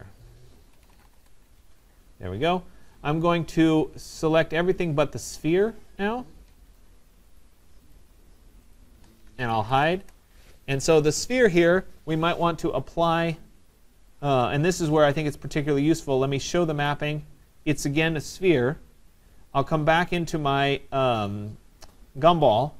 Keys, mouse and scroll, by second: 0.0 click, 0.6-1.5 typing, 5.4 click, 6.8 shift+click, 7.4 shift+click, 8.0 shift+click, 8.8 shift+click, 10.0 Return, 15.0 scroll, 16.9 click, 22.3 click.